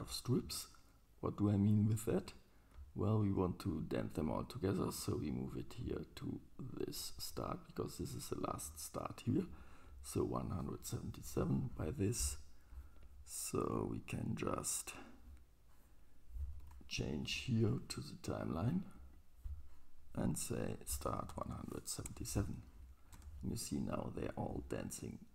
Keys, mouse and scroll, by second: 0.0-0.3 drag, 0.0-0.3 right drag, 3.0 middle click, 10.6-13.7 drag, 10.6-24.0 right drag, 16.6 ctrl+Tab, 17.3-19.1 drag, 20.7-24.0 drag, 21.4 KP_7, 23.2 space.